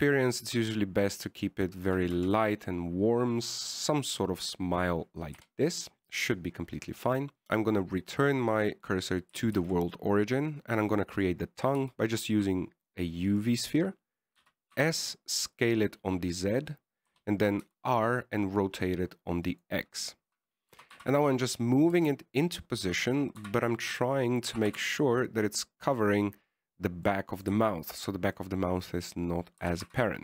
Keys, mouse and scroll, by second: 1.6 right click, 1.8 g, 3.5 Tab, 5.2 middle click, 6.7 KP_1, 7.4 click, 7.7 shift+s, 10.8 shift+a, 13.1 s, 15.7 s, 18.4 r, 22.0 g, 23.3 s, 24.1 s, 25.8 g, 28.3 middle click, 28.9 shift+middle click, 29.7 middle click.